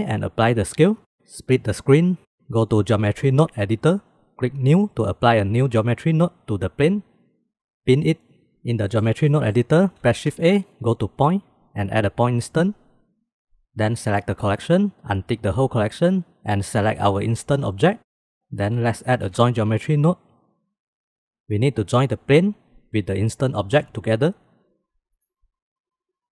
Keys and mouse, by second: 1.1-2.3 drag, 2.5-4.1 drag, 5.1 click, 8.9 middle click, 9.4 middle click, 10.2 shift+a, 14.4 click, 15.5 click, 17.0 click, 18.4 shift+a, 22.1-24.4 drag, 25.4-26.3 drag.